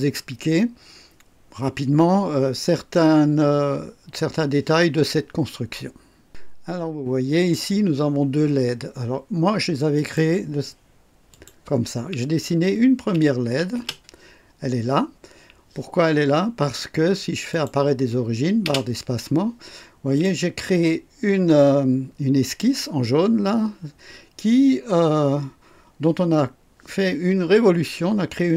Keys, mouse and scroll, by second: 7.4 click, 9.9 click, 11.3 click, 13.7 space, 13.7 space, 17.5 click, 18.6 space, 20.1 click.